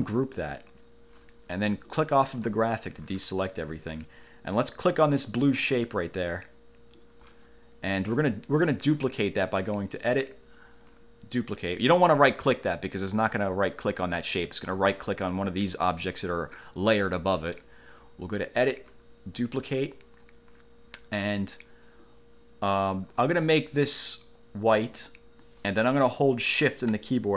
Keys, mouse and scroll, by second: 0.5 click, 2.5 click, 5.6 click, 6.2 click, 10.2 click, 19.8 click, 24.9 click.